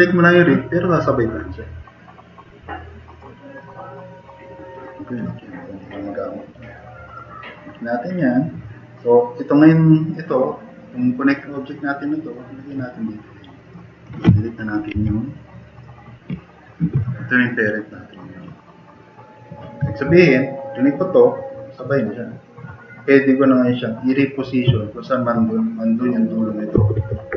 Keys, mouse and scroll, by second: 7.0 click, 14.9 Delete, 20.1 click, 20.9 click, 24.6 click, 27.0 ctrl+z.